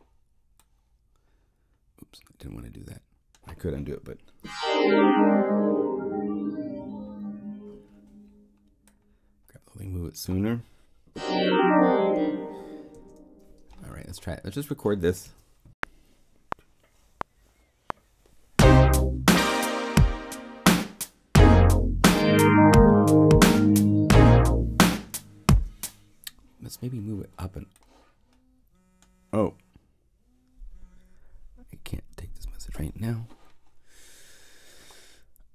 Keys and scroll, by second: 12.9 Return, 15.2 0, 15.6 *, 25.4 0.